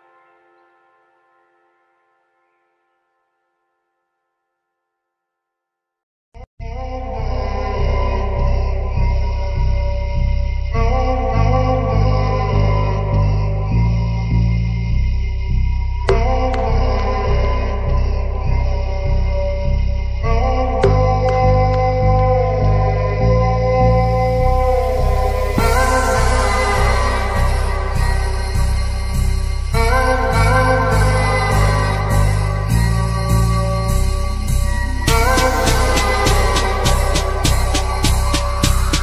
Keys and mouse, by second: 0.3-0.9 drag, 2.3 click, 6.5-8.2 drag, 10.3 click, 12.6 space, 13.9 space, 14.4 click, 17.3-18.3 drag, 21.0-22.3 drag, 22.6-23.4 shift+middle drag, 23.9-24.5 middle drag, 25.8 space, 26.3 space, 27.1-27.6 shift+middle drag, 28.3-29.1 drag, 29.8 click, 30.3 click, 35.0-36.8 drag.